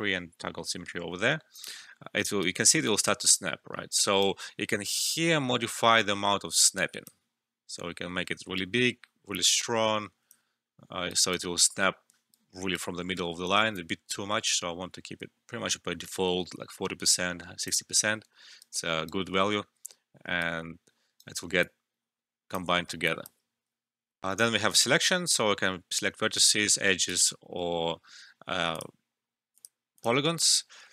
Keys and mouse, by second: 1.2 alt+middle click, 1.5 alt+click, 2.4-5.1 right drag, 5.1-11.1 drag, 11.1-13.7 right drag, 13.7-18.6 drag, 18.6 right click, 19.4 alt+middle click, 20.4 right click, 21.6 alt+click, 22.7 alt+middle click, 23.0 alt+click, 24.2 alt+F12, 26.3 click.